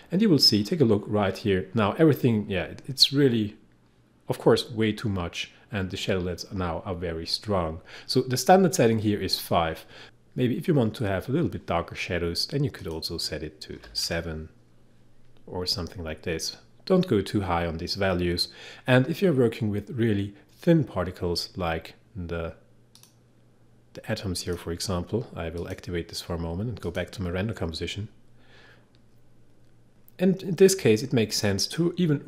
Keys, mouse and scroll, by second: 9.3 click, 10.0 5, 12.8 click, 13.8 7, 23.0 click.